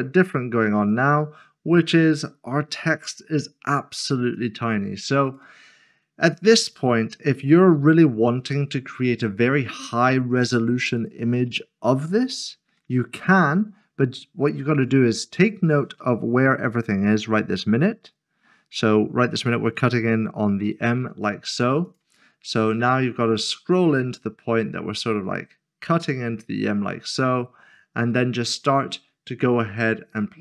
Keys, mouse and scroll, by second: 0.9 click, 4.3 click, 11.5 middle click, 14.8 click, 21.8 click, 22.7 scroll up 1, 24.1 scroll down 1, 24.5 scroll up 1.